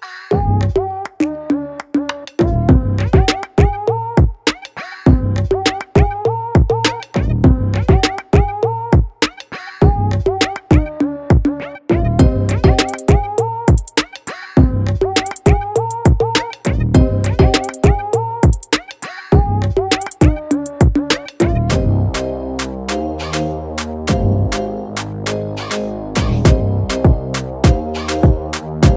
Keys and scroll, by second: 1.9 ctrl+[, 2.1 ctrl+t, 2.6 Return, 2.8 ctrl+[, 2.9 ctrl+[, 2.9 ctrl+[, 3.1 ctrl+[, 3.2 ctrl+[, 3.4 ctrl+[, 3.6 ctrl+[, 4.2 ctrl+t, 7.2 ctrl+t, 8.5 ctrl+[, 8.7 ctrl+[, 9.1 ctrl+z, 10.6 ctrl+t, 11.2 ctrl+z, 12.5 ctrl+t, 13.1 Return, 13.4 ctrl+t, 13.8 Return, 14.6 ctrl+z, 14.9 ctrl+z, 15.1 ctrl+z, 15.5 ctrl+z, 15.7 ctrl+e, 15.9 ctrl+z, 16.2 e, 17.0 v, 17.3 ctrl+z, 18.1 ctrl+z, 18.2 ctrl+e, 18.9 ctrl+z, 19.2 o, 19.7 ctrl+z, 22.6-23.2 ], 24.5 v, 24.6 ctrl+z, 25.3 o, 26.3 v, 26.7 o.